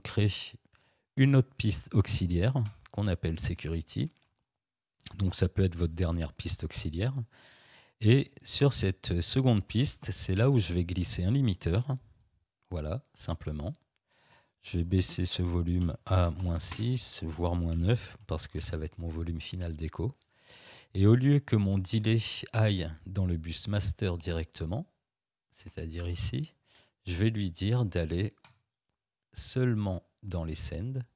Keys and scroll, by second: 0.1 Delete, 15.8 -, 16.4 6, 16.7 Return, 17.7 -, 18.1 9, 18.6 Return.